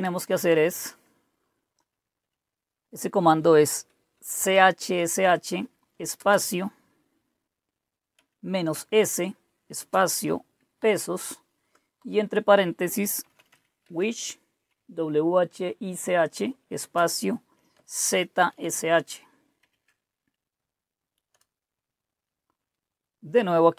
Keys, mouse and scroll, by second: 0.0-1.1 typing, 4.1-6.1 typing, 8.1-8.6 typing, 9.7 typing, 10.7 typing, 11.9-14.4 typing, 16.7-19.6 typing, 21.2 Return.